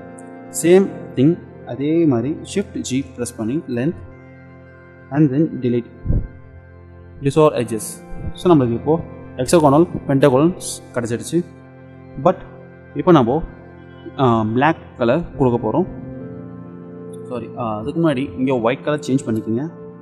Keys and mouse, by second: 1.2-3.0 drag, 3.0 shift+g, 5.7 Delete, 18.0-20.0 drag.